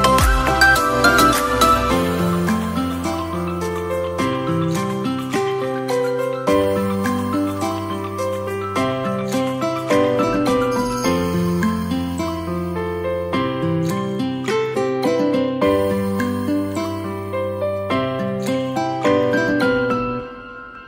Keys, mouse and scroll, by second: 0.1-0.8 middle drag, 0.8 Tab, 1.1-1.9 scroll up 4, 1.9 click, 3.2-4.3 middle drag, 4.3 r, 6.6 middle click, 7.5 click, 8.9 Tab, 9.2 click, 10.0 middle click, 10.3-10.6 scroll down 2, 10.6-13.1 middle drag, 13.1-14.4 drag, 14.4-15.6 scroll down 10, 15.6 click, 16.4 middle click, 17.3 click, 19.3 click, 20.3 click.